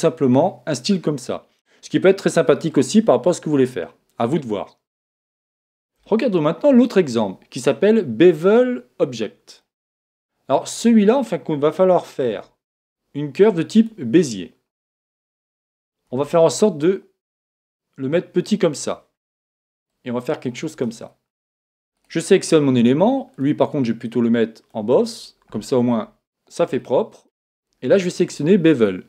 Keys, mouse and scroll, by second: 12.2 shift+a, 16.1 s, 18.9-21.8 drag, 22.0 right click, 23.3 click, 26.8-29.0 middle drag, 28.7 click.